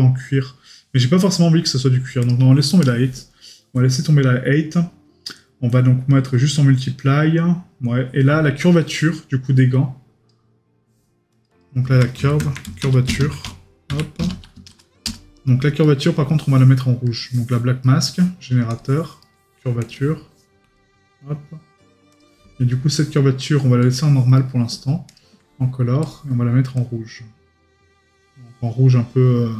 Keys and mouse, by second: 15.8 right click, 17.8 right click, 19.2 right click, 24.4 right click.